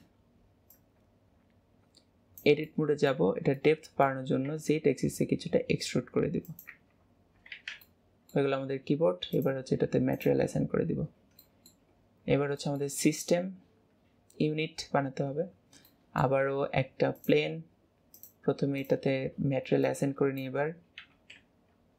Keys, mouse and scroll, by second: 2.8 middle click, 3.3 Tab, 3.7 middle click, 6.9-7.9 middle drag, 9.4-10.7 drag, 10.7 middle click, 11.1 scroll down 5, 11.6 middle click, 12.1-13.1 scroll up 4, 13.1-15.3 shift+middle drag, 15.7 scroll down 4, 18.2-19.9 drag, 21.7 alt+z.